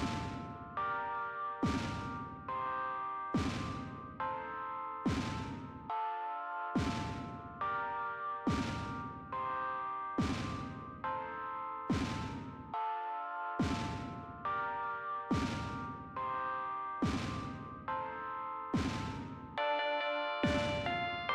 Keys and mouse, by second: 19.0 click, 20.3 click.